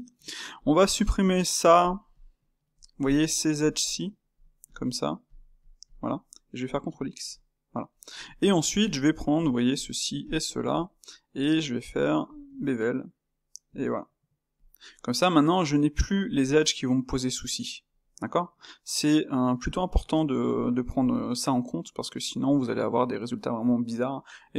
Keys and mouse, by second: 0.1 Tab, 0.5 click, 1.8 shift+click, 2.3 middle click, 3.0 shift+click, 3.2 shift+click, 3.8 shift+click, 3.9 middle click, 4.6 shift+click, 5.2 shift+click, 5.8 shift+click, 6.1-7.1 middle drag, 7.1 ctrl+x, 7.9 shift+middle click, 8.6 click, 9.1 middle click, 9.7 shift+click, 10.3 shift+click, 10.5-12.3 middle drag, 12.3 space, 14.7-17.8 middle drag, 20.1-24.5 middle drag.